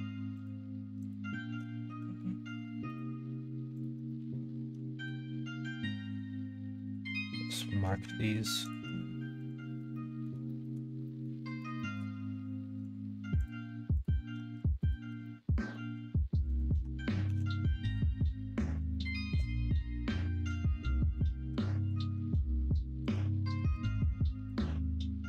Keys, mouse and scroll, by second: 0.3 shift+click, 1.0 shift+click, 1.8 ctrl+z, 3.7 click, 4.1 middle click, 5.0 ctrl+e, 7.3 middle click, 8.6 alt+click, 9.9 middle click, 10.4 shift+middle click, 11.0 middle click, 11.7 shift+middle click, 13.3 ctrl+click, 13.9 ctrl+click, 14.7 ctrl+click, 15.2 middle click, 16.5 ctrl+click, 17.3 ctrl+e, 18.8 middle click, 20.6 middle click, 21.8 ctrl+click, 23.0 click, 23.7 click, 24.4 ctrl+click, 24.7 middle click.